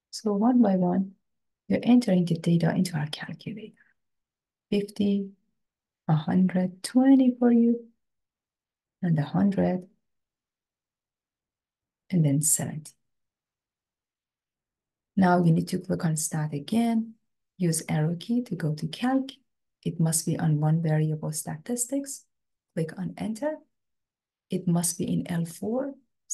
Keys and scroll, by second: 0.1 0, 0.3 0, 1.5 Return, 3.3 5, 4.1 0, 5.0 Return, 6.1 1, 6.9 2, 7.7 0, 8.6 Return, 9.7 1, 10.6 0, 10.9 0, 11.9 Return, 13.1 7, 14.0 0, 14.9 Return, 18.3 Right, 23.3 Return.